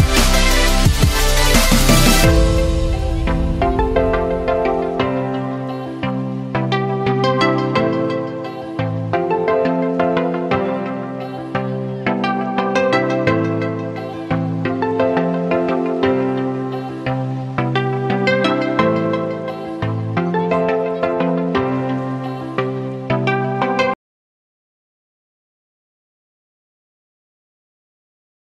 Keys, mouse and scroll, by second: 1.2 shift+/, 1.4 space, 2.3 p, 2.5 x, 3.9 /, 4.8-9.1 drag, 9.3 ctrl+c, 9.6 ctrl+v, 10.1-18.6 drag, 18.6 Up, 19.7 click, 20.3 Up, 25.6-27.3 drag, 28.3 click.